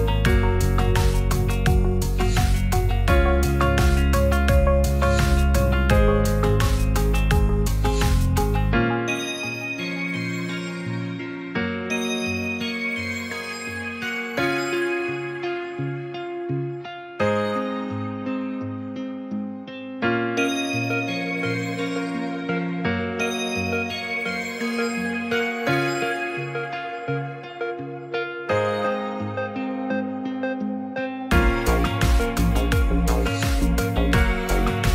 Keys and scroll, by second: 4.7 t, 6.8 Return, 9.6 BackSpace, 12.8 BackSpace, 16.8 BackSpace, 17.1 Return, 25.5 Return, 28.0 BackSpace, 29.0 space.